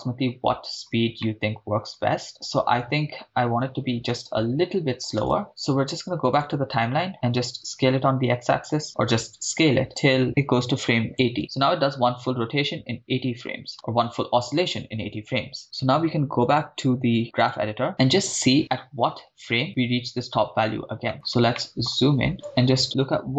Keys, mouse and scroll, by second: 1.2 middle click, 5.2 shift+space, 6.4-7.5 drag, 7.6 s, 7.8 x, 11.1 ctrl+click, 11.9-13.4 drag, 13.7 shift+space, 16.8 click, 17.9 middle click, 17.9 scroll down 3, 21.1-22.5 scroll up 8, 21.6 middle click, 22.5 click, 22.8-23.3 scroll down 1.